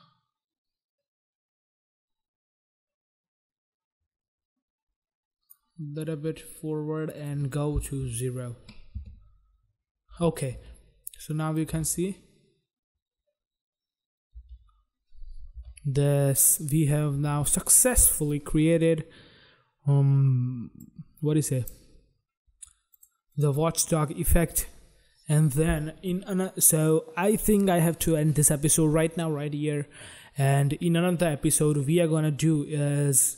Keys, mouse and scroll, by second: 7.4 click, 8.2 0, 9.1 Return, 11.4 click, 11.9 space, 14.5 space, 15.7 space, 17.3 space, 20.8 click, 23.1 click, 23.2 click, 23.6 double click.